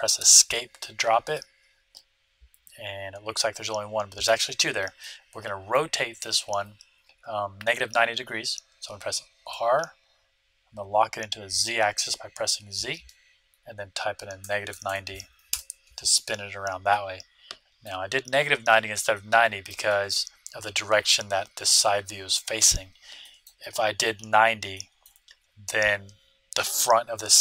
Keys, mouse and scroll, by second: 1.3-3.2 middle drag, 4.9-6.7 middle drag, 9.4 r, 16.9-21.6 middle drag, 23.2-26.4 middle drag.